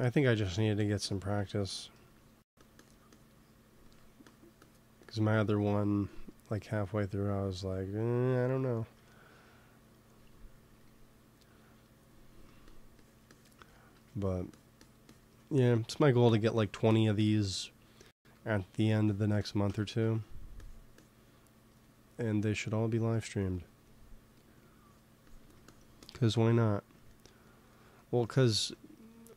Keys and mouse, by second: 0.4-3.7 drag, 5.7-7.0 drag, 7.4 ctrl+s, 9.9 click, 10.6 f, 12.6-19.8 drag, 18.2 f, 19.8 ctrl+z, 20.0 ctrl+z, 21.7-24.4 drag, 24.4 f, 25.4-28.1 drag, 28.5 ctrl+s.